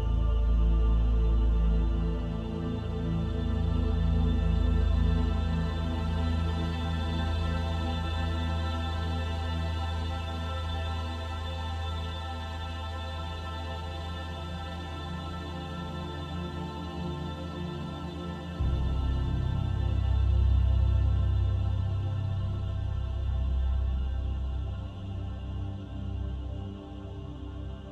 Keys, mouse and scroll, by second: 0.4 click, 1.5 click, 5.0 scroll down 1, 5.7-6.5 scroll down 14, 6.4 scroll up 1, 7.7 click, 8.4 click, 12.9 click, 13.5-15.0 scroll down 5, 15.0 click, 15.0 scroll down 1, 20.5-21.7 scroll up 7, 22.3-24.7 scroll up 7, 24.7 middle click, 27.3 click.